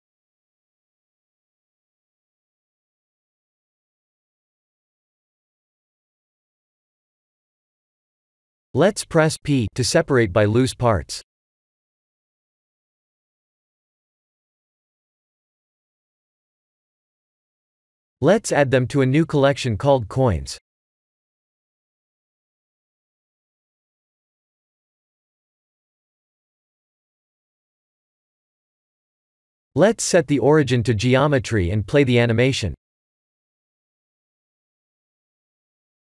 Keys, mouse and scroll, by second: 0.4 click, 1.3 click, 3.4 click, 6.2 click, 7.3 Tab, 8.2 a, 9.3 p, 13.8 Tab, 14.7 m, 17.2 ctrl+z, 18.2 m, 26.1 click, 35.7 click.